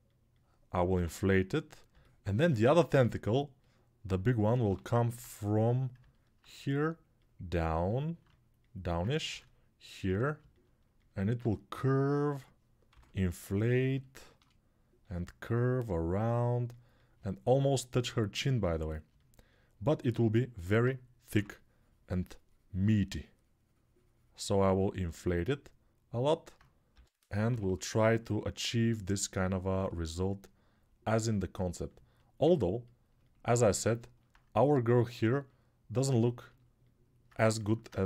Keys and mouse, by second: 0.7 6, 1.6-12.7 alt+drag, 4.4 g, 9.1 ctrl+r, 12.7 6, 14.8 g, 19.4-33.7 alt+drag, 21.1 6, 26.7 g, 27.2 ], 27.4 ], 37.3-38.0 alt+drag.